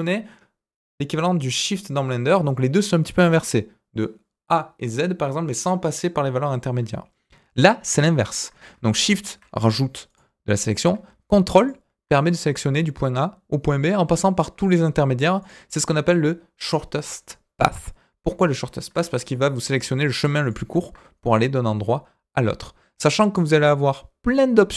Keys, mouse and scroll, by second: 8.2 click, 9.0 shift+click, 10.0 click, 11.5 ctrl+click, 15.4 click, 19.3 middle click, 20.4 ctrl+click.